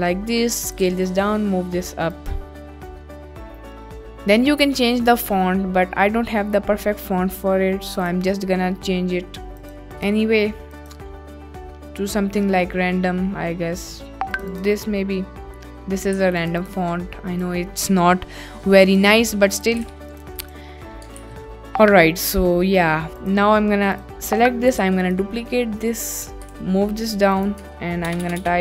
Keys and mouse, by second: 0.7 click, 0.8 g, 2.1 click, 2.8 s, 3.1 drag, 3.5 ctrl+s, 8.0 click, 9.5 click, 10.0 drag, 10.8 drag, 16.1 s, 16.4 click, 16.5 click, 17.4 click, 18.9 click, 19.6 click, 19.8 g, 20.1 click, 20.1 z, 21.3 ctrl+s, 21.5 middle click, 23.2 click, 24.9 shift+d, 26.5 g, 27.0 z, 27.4 click, 27.6 Tab, 28.1-28.6 typing.